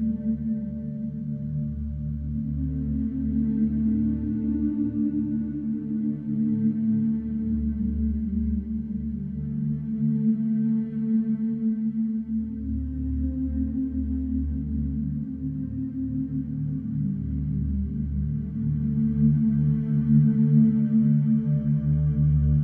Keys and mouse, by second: 0.6-1.4 typing, 0.9-4.4 alt+shift+middle drag, 5.7-7.4 drag, 9.3 click, 10.3 click, 11.3-13.8 typing, 15.1 click, 15.4 click, 16.5 click, 18.0 click, 19.4-20.7 alt+shift+drag, 21.1-21.8 typing, 21.3-22.6 ctrl+drag.